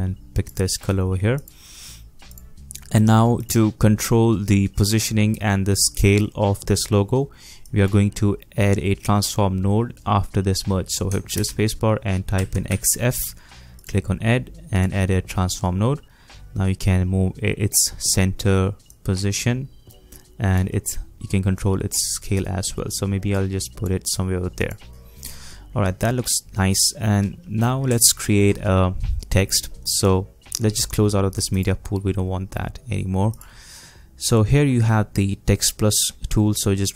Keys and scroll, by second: 11.3 shift+space, 12.4 x, 12.7 f.